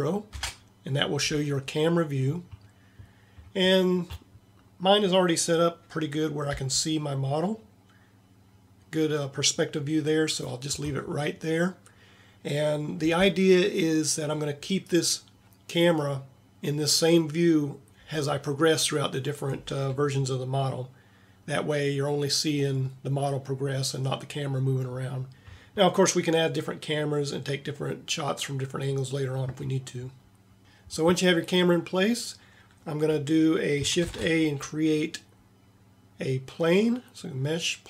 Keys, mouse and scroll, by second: 0.3 ctrl+KP_0, 6.5 g, 34.0 shift+a.